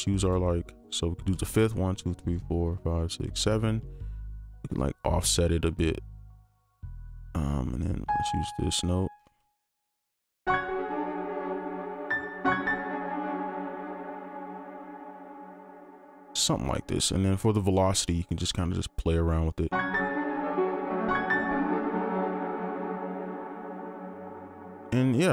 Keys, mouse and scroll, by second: 0.1 ctrl+click, 1.8 shift+Up, 2.1 shift+Up, 2.4-3.0 shift+Up, 3.3 shift+Up, 4.5 alt+click, 9.5 ctrl+click, 10.4 ctrl+Up, 10.9 space, 11.1 right click, 13.0 space, 13.4 alt+click, 15.3 alt+click, 18.3 right click, 20.9 space, 22.1 right click, 24.0 alt+click.